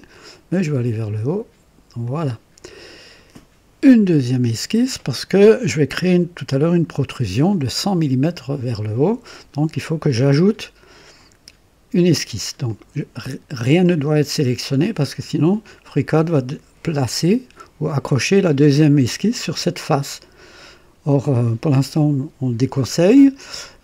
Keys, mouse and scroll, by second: 0.1 click, 2.0 click, 12.7 click.